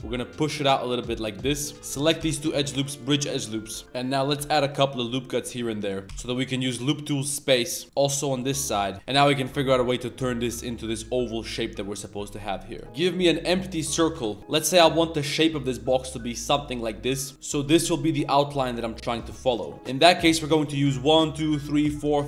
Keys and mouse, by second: 1.7 middle click, 1.7 2, 1.9 z, 1.9 click, 3.6 z, 3.8 ctrl+r, 4.1 middle click, 4.4 2, 4.7 alt+click, 5.4 middle click, 5.8 alt+shift+click, 6.1 w, 8.9 click, 12.8 Tab, 12.8 shift+a, 13.9 r, 14.4 g, 17.3 s, 19.4 click, 20.2 click, 21.0 shift+click, 21.5 shift+click, 21.8 shift+click, 22.1 shift+click.